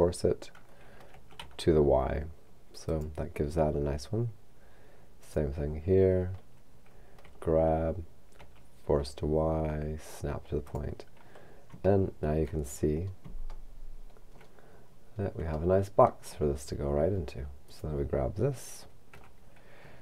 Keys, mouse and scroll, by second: 1.1 f, 1.4 y, 2.9 click, 5.3 right click, 7.2 g, 10.7 click, 12.0 shift+middle click, 12.7-13.6 shift+scroll up 1, 13.6 middle click, 14.7-15.6 scroll up 1, 15.6-17.1 middle drag, 17.7 right click, 19.1 g.